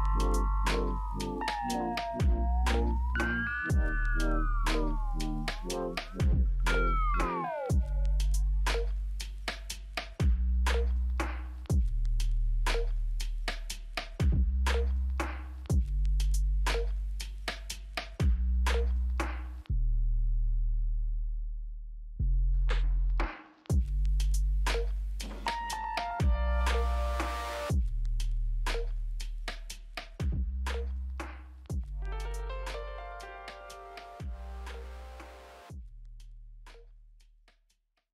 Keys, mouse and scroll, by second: 2.1 scroll down 1, 2.8-3.2 scroll down 1, 3.2 scroll up 2, 5.4 scroll up 1, 5.6 ctrl+click, 7.6 ctrl+click, 8.8 right click, 16.9 scroll down 5, 17.4-18.8 scroll up 5, 18.8 middle click, 19.5-20.3 scroll down 4, 20.3 middle click, 20.9 middle click, 22.3 Delete, 25.2 scroll down 1, 26.0-27.8 scroll down 2, 28.4 ctrl+click, 28.9 ctrl+click, 31.4 ctrl+click.